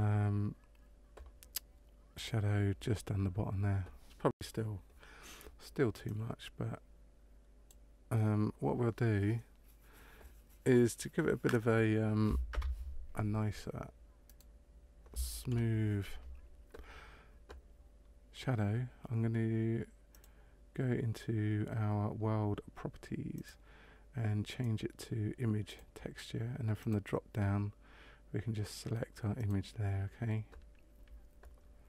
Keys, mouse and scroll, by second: 2.1 click, 6.0 click, 12.5 KP_0, 14.2 right click, 15.5 Delete, 20.0 click, 23.3 click, 26.7 click.